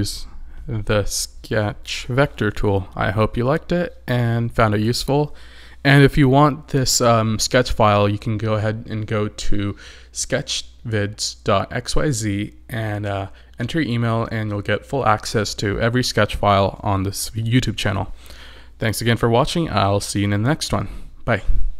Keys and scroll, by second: 0.2 super+=.